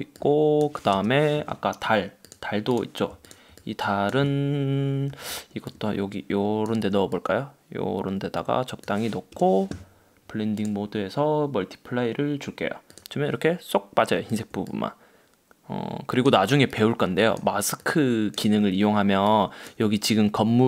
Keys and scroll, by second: 1.1 Return, 5.2 super+t, 9.4 Return.